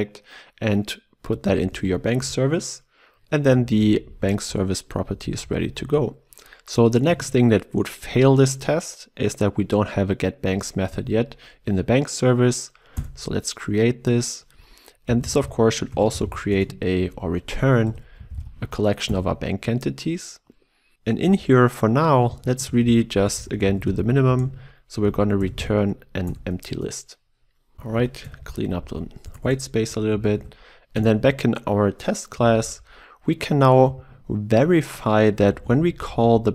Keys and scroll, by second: 1.7 ctrl+w, 10.9 alt+Return, 16.5 Return, 26.3 Return, 30.2 ctrl+s, 30.4 ctrl+e.